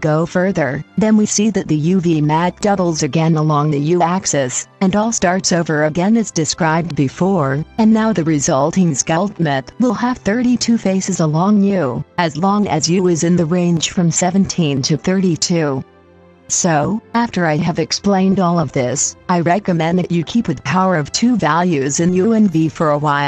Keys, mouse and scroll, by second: 1.4-23.1 drag, 23.2 click.